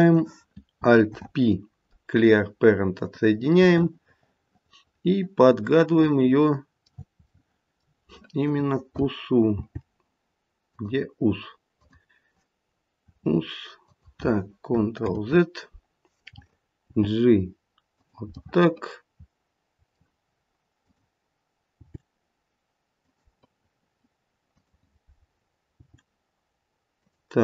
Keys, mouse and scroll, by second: 1.0 alt+p, 3.6 middle click, 5.7 middle click, 9.5 g, 11.7 click, 13.0 e, 15.0 ctrl+z, 16.8 g, 18.3 middle click, 19.1 middle click, 20.7 click, 21.8 g, 24.5 click, 25.7 g.